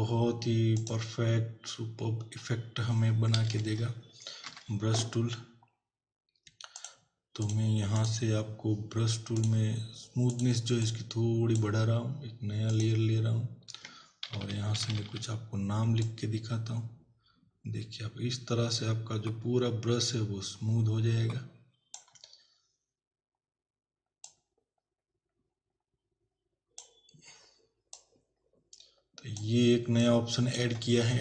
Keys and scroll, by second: 3.5 alt+Delete, 4.4 b, 14.3 ].